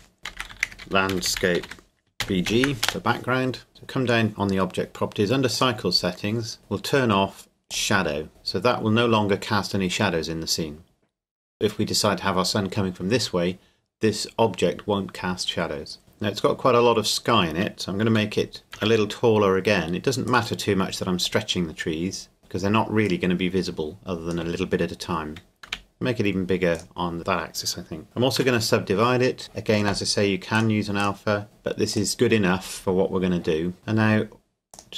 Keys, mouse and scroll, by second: 0.3-2.5 typing, 2.9 Return, 3.7 click, 6.1-6.7 scroll down 1, 7.8 click, 18.1 s, 18.8 z, 20.3 click, 25.6 s, 25.7 x, 26.8 click, 28.0 Tab, 28.4 w, 29.4 click, 34.8 click.